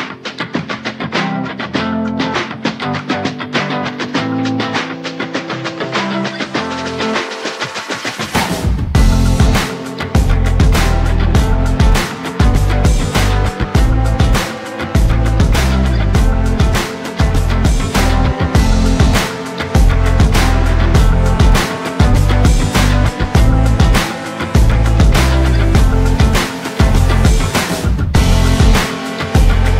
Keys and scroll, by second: 11.3 ctrl+z, 11.6 ctrl+z, 12.1 ctrl+z, 12.9 ctrl+z.